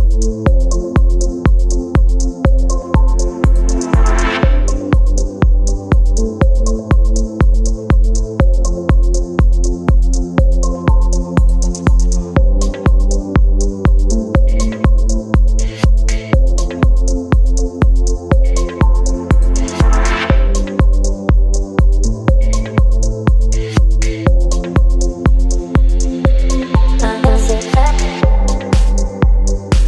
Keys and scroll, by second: 7.7 Return, 22.4 Return, 24.1 space.